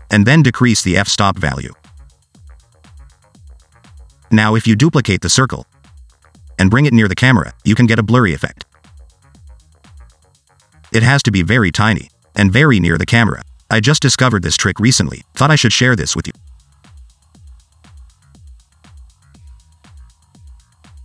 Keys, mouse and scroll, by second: 1.3 click, 3.1 click, 3.5 middle click, 3.8 click, 4.3 click, 4.6 scroll down 1, 4.8-5.3 scroll up 2, 6.4 middle click, 7.5 scroll up 1, 7.6 g, 8.3 s, 8.8-9.3 scroll up 1, 9.3 s, 11.0-11.5 scroll down 2, 11.3 middle click, 11.5 shift+middle click, 11.7 click, 12.8 g, 13.6 click, 14.0 click, 14.3 click, 14.7 click, 15.3 click, 15.7 s, 16.8 s, 17.5 click, 19.8 alt+d, 20.3 click.